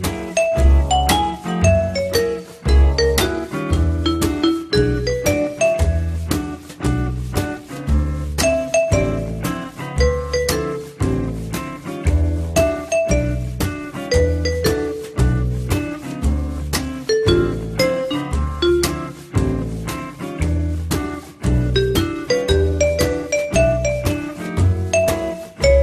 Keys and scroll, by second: 0.9 1, 3.1 r, 8.1 f, 10.7 w, 22.2 t.